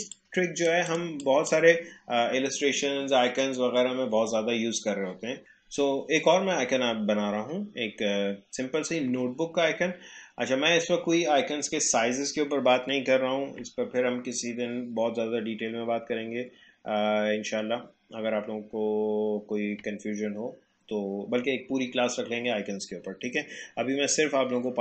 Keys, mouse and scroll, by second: 0.1 click, 1.0 space, 1.2 click, 1.5 space, 5.4 ctrl+z.